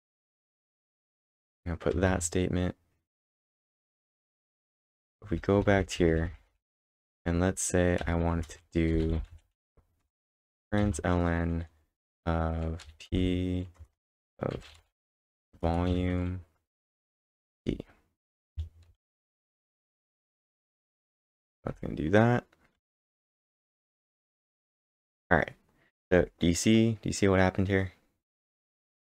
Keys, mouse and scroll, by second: 0.0-1.8 typing, 2.1 ctrl+Tab, 4.7-8.0 typing, 8.3 Return, 10.8 shift+(, 12.6-13.3 typing, 15.5 Return, 15.7-16.4 typing, 19.8-21.7 typing, 22.9 ctrl+`, 23.7 Up, 24.3 Return.